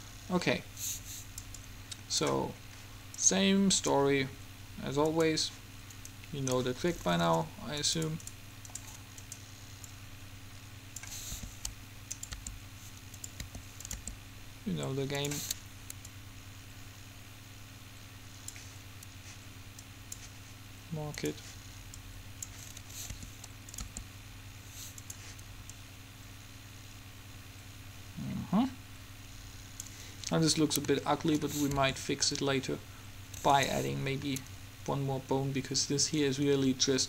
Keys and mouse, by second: 1.8-2.8 drag, 4.8 click, 5.2-8.3 drag, 9.2 click, 9.4 right click, 11.0 click, 11.5 r, 12.5 g, 13.5 click, 13.5 r, 14.2 g, 16.2-18.0 drag, 20.0-24.0 drag, 23.2 r, 24.0 g, 25.9 click, 26.6 click, 30.5-32.9 middle drag, 32.0 r.